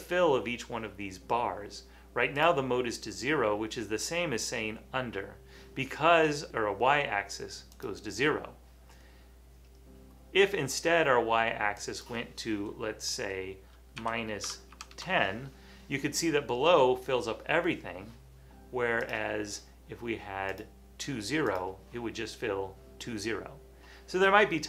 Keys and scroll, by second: 14.0-15.3 typing.